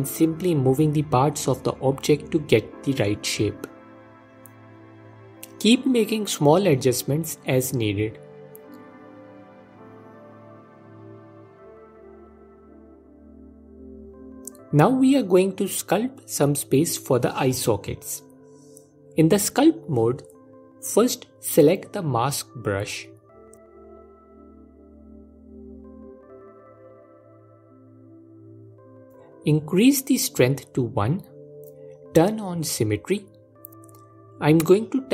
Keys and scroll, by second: 3.6 f, 7.8 ctrl+Tab, 11.1 s, 22.3 ctrl+Tab, 32.1 f.